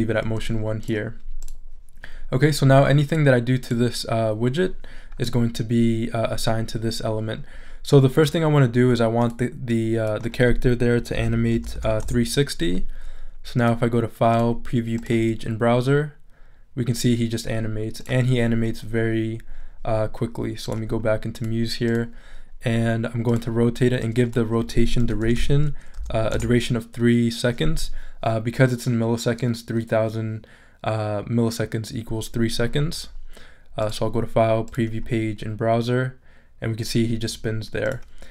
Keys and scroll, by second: 10.9-12.2 typing, 24.8-25.7 typing, 26.3 Return.